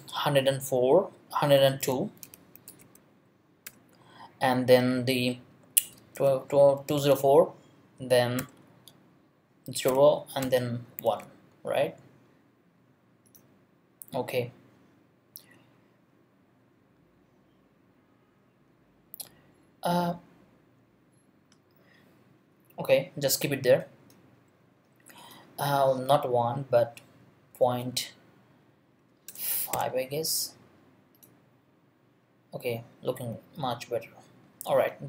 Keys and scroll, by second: 1.4-3.6 typing, 5.7-7.0 typing, 8.4 ,, 9.9 0, 10.4 ,, 11.0 |, 27.5 ., 29.0 Right, 29.3 BackSpace, 29.7 5.